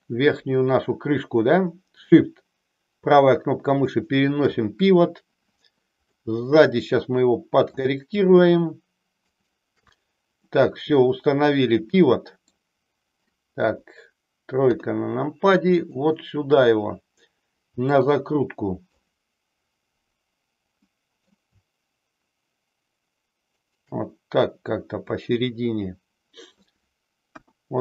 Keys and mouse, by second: 6.1-7.7 middle drag, 9.3 shift+right click, 10.4-12.4 middle drag, 13.7 KP_1, 17.8 middle click, 20.8 middle click, 25.0-26.4 middle drag, 27.3 KP_1.